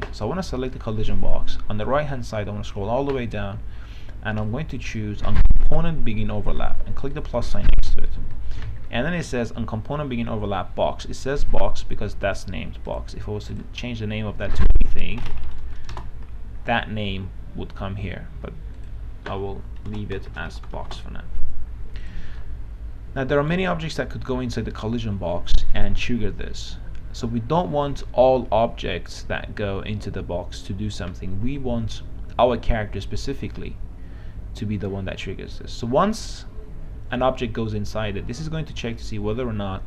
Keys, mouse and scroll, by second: 8.3 right click, 9.2-10.1 scroll up 1, 13.1 click, 15.5-16.2 typing, 19.0 click, 20.1-21.5 typing, 22.3 click, 22.6-24.4 right drag.